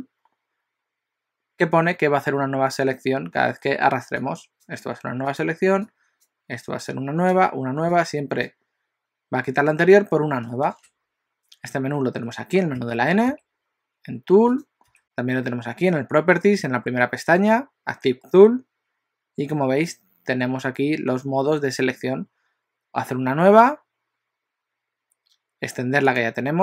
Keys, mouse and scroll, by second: 4.3 click, 5.4 click, 6.0 click, 7.0 click, 8.0 click, 12.9 n, 13.4 n, 14.5 click, 26.1 click.